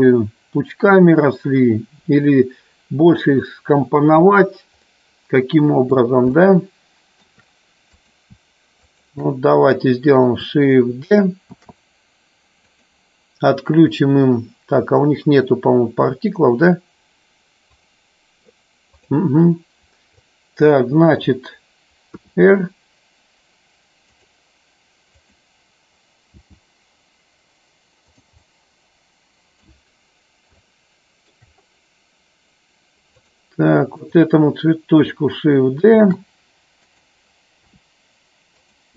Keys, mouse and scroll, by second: 5.0-6.1 middle drag, 6.5-7.4 shift+middle drag, 8.0 click, 9.0 shift+click, 11.8 shift+d, 12.8 click, 17.6 click, 19.0 click, 20.2 click, 25.3 click, 28.6-30.0 middle drag, 30.6 shift+middle click, 34.0 click, 36.0 shift+d, 36.9 click, 37.5 r.